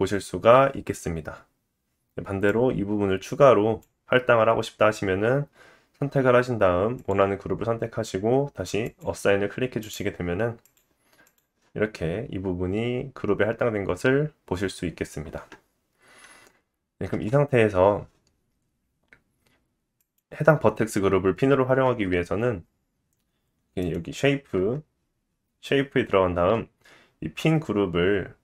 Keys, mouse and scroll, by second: 7.0-8.8 drag, 9.9 click, 10.7 click, 17.1 Tab, 20.2-26.8 drag, 21.2-23.8 scroll down 8, 23.8-26.8 middle drag, 23.8-26.8 right drag, 24.4-25.9 scroll down 8.